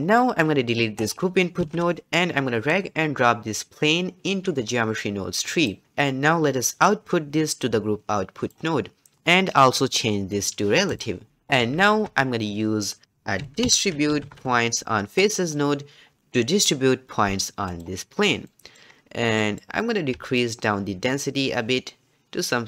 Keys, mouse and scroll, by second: 0.2-1.0 middle drag, 1.0 click, 1.6 x, 2.6 click, 5.8-6.6 middle drag, 6.6-9.1 drag, 10.9 click, 11.8 shift+a, 18.5 middle click, 18.9-19.4 scroll up 1, 19.4-20.4 middle drag, 20.4-22.6 shift+drag.